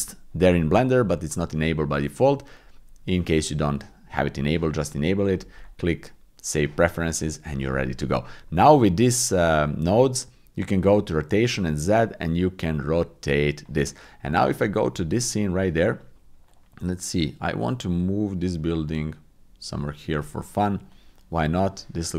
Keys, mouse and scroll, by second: 11.3-13.6 drag, 14.5 click, 16.5-20.1 drag, 20.9 drag.